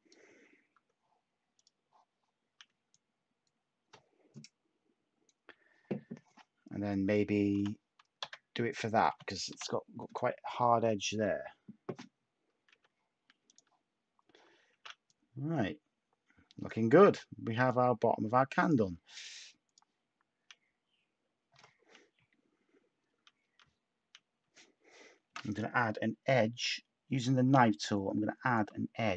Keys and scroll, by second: 0.7 Tab, 7.5-9.5 typing, 12.7 Tab, 14.4-15.2 typing, 18.9 Tab, 25.3 k.